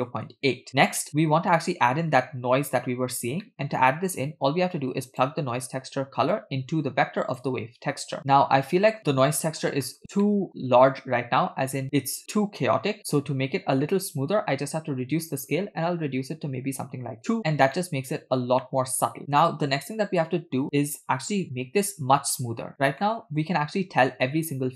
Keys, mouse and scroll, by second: 0.7 middle click, 1.3-2.6 scroll down 1, 2.6-3.0 scroll down 1, 3.5 middle click, 4.3-5.3 drag, 6.4-8.0 drag, 8.2 scroll up 3, 8.2-9.0 middle drag, 9.3-9.6 shift+middle drag, 9.8 middle click, 10.2 shift+middle drag, 10.8 scroll up 1, 15.4-17.4 drag, 17.8-20.9 middle drag, 23.0-23.4 shift+middle drag.